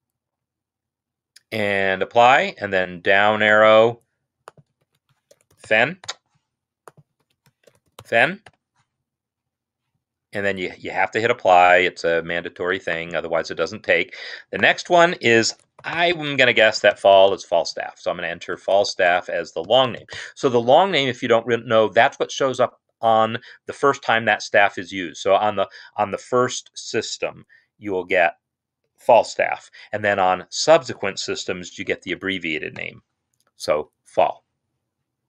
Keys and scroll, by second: 4.8 ctrl+a, 5.4-6.2 typing, 7.2 ctrl+a, 7.6-8.4 typing, 15.1 ctrl+a, 15.5-17.3 typing, 18.7-20.2 typing, 31.1 ctrl+a, 31.5-32.7 typing.